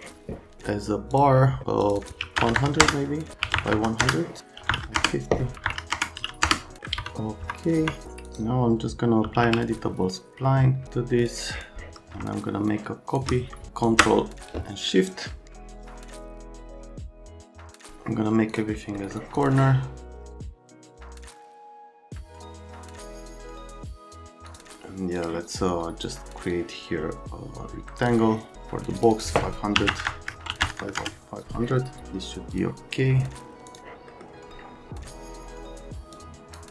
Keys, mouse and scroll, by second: 1.1 click, 1.8 click, 1.9 click, 2.2-3.5 typing, 2.8 KP_Enter, 4.0 KP_Enter, 4.6-6.2 typing, 4.9 KP_Enter, 5.9 KP_Enter, 6.4 KP_Enter, 7.0 F3, 7.4 F3, 7.8 F3, 8.2 click, 9.0-9.8 typing, 11.2 click, 11.5 click, 12.7 shift+click, 13.7 ctrl+shift+click, 15.5 click, 15.7 middle click, 16.1 click, 16.3 click, 16.7 click, 17.0 click, 17.1 right click, 17.3 click, 17.7 ctrl+a, 18.5 click, 19.0 right click, 19.3 click, 20.0 click, 20.1 click, 20.3 right click, 20.5 shift+click, 21.0 middle click, 21.3 1, 21.4 1, 21.5 1, 21.6 click, 21.8 right click, 22.0 right click, 22.2 right click, 22.6 middle click, 22.8 middle click, 23.4 right click, 23.5 F2, 23.6 F2, 23.7 1, 23.8 right click, 24.1 click, 24.4 click, 25.1 click, 26.5 click, 28.9 click, 29.1 click, 29.7-30.8 typing, 30.3 Tab, 30.9 KP_Enter, 32.5 click, 33.6 click, 34.1 middle click, 36.1 middle click.